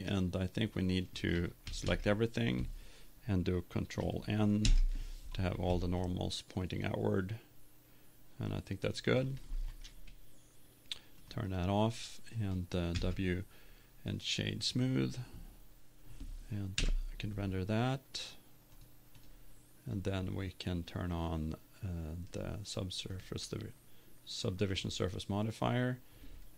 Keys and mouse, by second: 1.8 a, 1.8 a, 5.0 ctrl+n, 6.0 middle click, 11.3-13.0 drag, 13.0 w, 15.5 middle click, 19.2 F12, 19.5-20.7 drag, 22.3-25.0 drag.